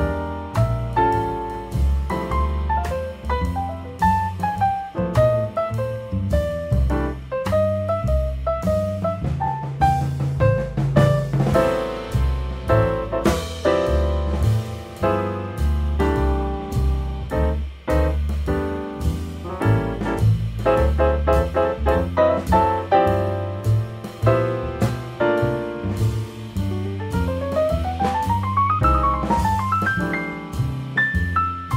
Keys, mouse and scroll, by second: 2.4-4.5 drag, 5.2 0, 6.7 g, 9.8-11.9 drag, 13.3 g, 18.4 click, 18.7 click, 19.0 click, 20.1 click, 20.8 scroll down 3, 21.4 click, 26.7-27.0 scroll up 2, 27.0 middle click, 27.2-27.6 scroll down 5, 27.9 click, 28.5 g, 29.8 click.